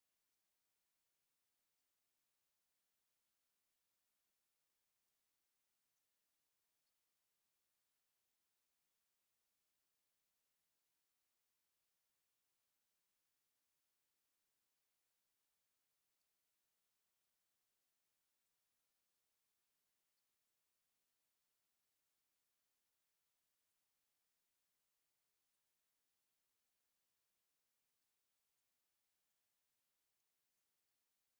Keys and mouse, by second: 1.7 click, 2.8 click, 7.6 click, 10.4 click, 12.4 click, 20.4 click, 21.4 click, 26.4 click, 31.1 click.